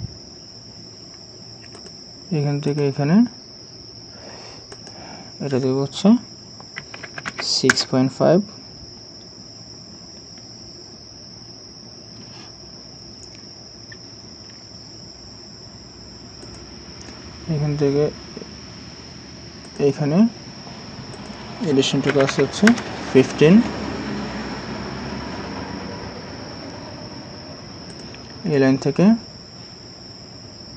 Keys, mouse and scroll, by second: 6.8-7.3 typing, 7.7 Return, 22.1 typing, 22.7 Return.